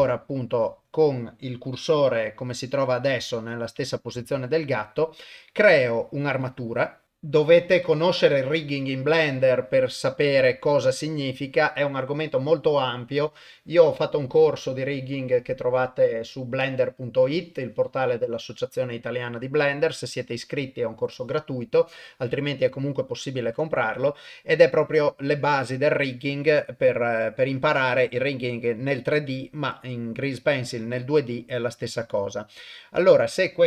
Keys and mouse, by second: 0.0 shift+a, 2.5 middle click, 3.4 KP_0, 4.3 shift+a, 7.0 click, 33.1-33.6 drag.